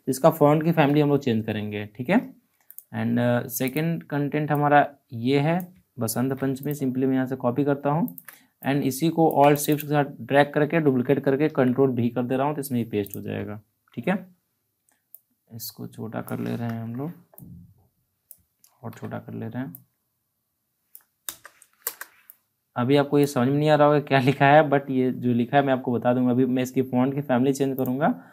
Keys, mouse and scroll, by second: 6.1 ctrl+c, 6.5 click, 11.4 ctrl+v, 13.0 click, 13.7 ctrl+t, 15.1-16.6 drag, 16.6 Return, 17.3-18.7 drag, 18.7 ctrl+t, 19.7-21.2 drag, 21.2 Return, 22.2 click, 27.7-28.3 drag.